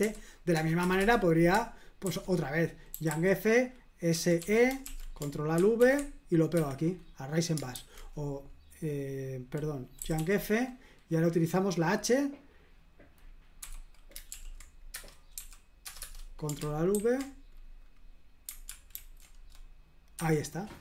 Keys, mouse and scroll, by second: 0.0 typing, 0.8 Return, 1.0 Return, 2.0 super+h, 2.9 typing, 4.1-4.9 typing, 4.9 super+l, 5.8 ctrl+alt+v, 6.6 Escape, 7.7 super+h, 10.0 y, 13.6 h, 14.3 super+l, 14.9 Return, 15.3 o, 15.8 Return, 16.0 Return, 16.9 ctrl+super+v, 18.9 ctrl+alt+v, 20.2 Escape.